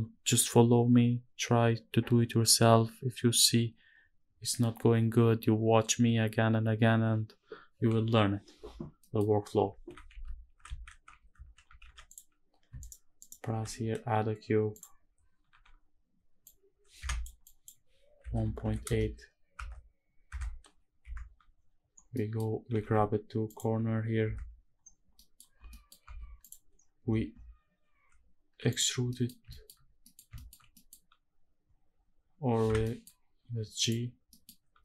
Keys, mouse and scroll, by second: 8.7 middle click, 9.4 scroll up 1, 12.9 shift+right click, 13.2 shift+a, 15.2 n, 16.1 click, 17.1-18.7 drag, 19.4 Tab, 20.0 Tab, 20.7 KP_Decimal, 21.2-21.8 scroll down 2, 21.8 middle drag, 22.4 g, 23.2 ctrl+click, 24.0 KP_Decimal, 24.5-24.9 scroll down 3, 24.9 middle drag, 25.4 middle drag, 25.4 scroll down 1, 25.7 Tab, 26.1 click, 26.4-27.5 scroll down 6, 27.5-28.4 scroll up 4, 28.4 click, 28.4 scroll up 1, 28.7 scroll down 1, 28.8 middle click, 29.2 shift+middle click, 29.6 scroll down 1, 29.7 middle click, 30.0 shift+middle click, 30.3 scroll up 1, 30.4 middle click, 32.3 Escape, 32.5 middle click, 33.5 click, 33.9 scroll down 1, 34.0 middle click, 34.5 middle click.